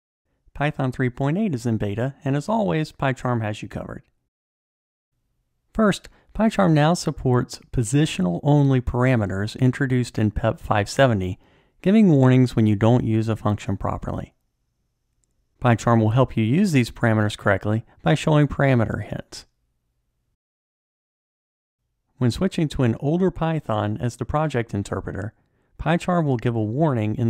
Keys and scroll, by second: 15.3 Tab.